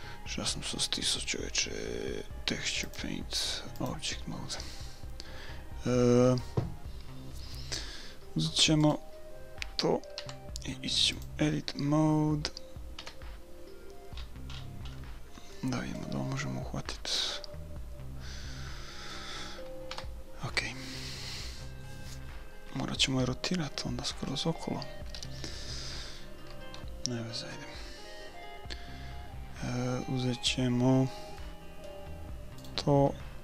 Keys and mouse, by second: 2.9-4.8 drag, 8.8 right click, 8.9-10.8 drag, 10.2 Tab, 13.0 KP_1, 14.2-18.3 middle drag, 19.9 KP_1, 31.4 middle click, 32.8 click, 32.8-33.4 right drag.